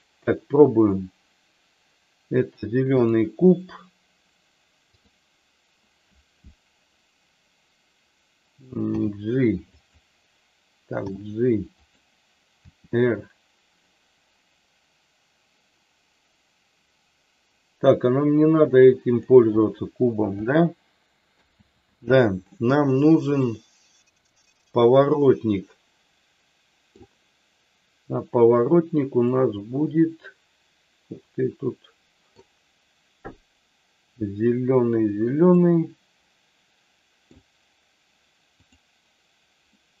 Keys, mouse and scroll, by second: 8.8 g, 9.7 click, 10.9 g, 11.8 click, 12.7 r, 21.6 ctrl+z, 23.3-26.9 middle drag, 29.2-32.4 middle drag, 35.5-37.3 middle drag, 38.5 click, 39.7-40.0 middle drag.